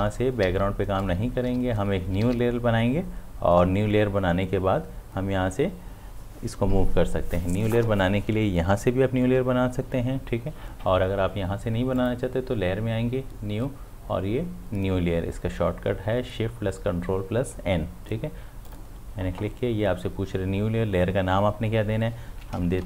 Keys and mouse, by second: 1.3 ctrl+z, 2.1 ctrl+d, 2.2 v, 12.0 click, 18.7 click.